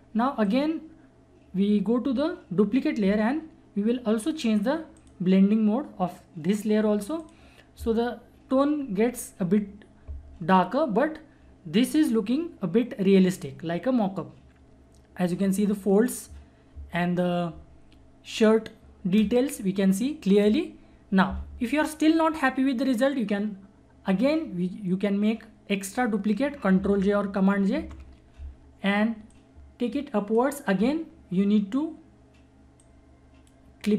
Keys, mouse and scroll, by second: 0.4 click, 5.0 click, 26.8 ctrl+Num_Lock, 27.8 ctrl+j, 29.3-33.9 drag.